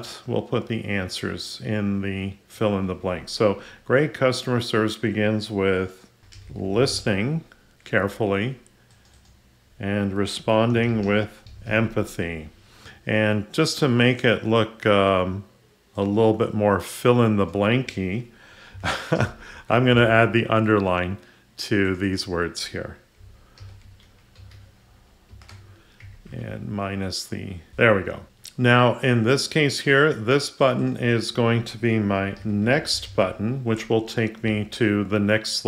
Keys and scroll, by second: 19.5 ctrl+u, 23.6 ctrl+u.